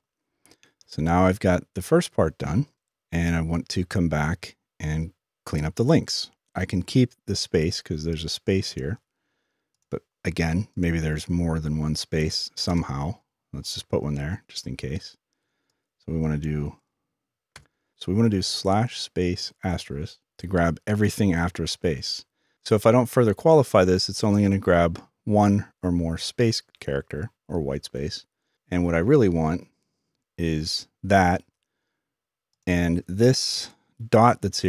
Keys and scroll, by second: 18.2 typing.